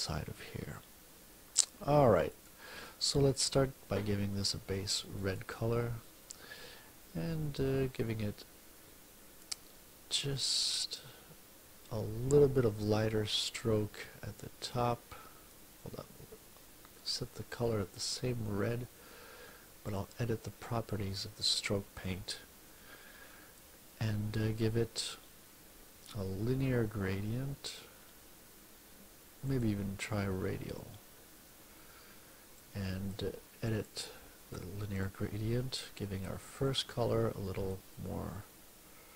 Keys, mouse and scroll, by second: 2.3 click, 3.3 click, 5.2 click, 16.9 right click, 17.9 click, 19.9 click, 21.5 click, 29.5 click, 32.6 click, 33.7 click, 34.9 click, 37.2-39.1 drag.